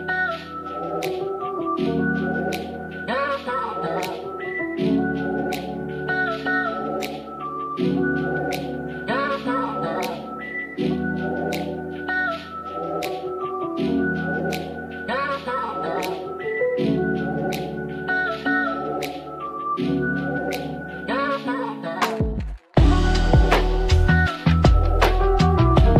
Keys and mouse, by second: 0.0 click, 0.8 g, 1.3 y, 1.8 x, 4.5 click, 5.9-8.9 drag, 9.6 s, 10.5 click, 11.6 e, 13.3 click, 15.2-21.6 shift+z, 16.2 middle click, 19.3 shift+middle click, 22.6 e, 23.8 click.